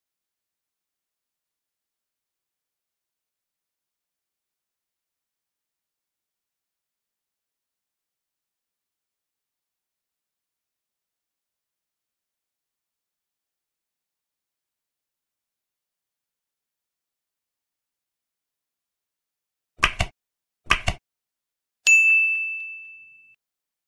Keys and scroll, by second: 1.6 Tab.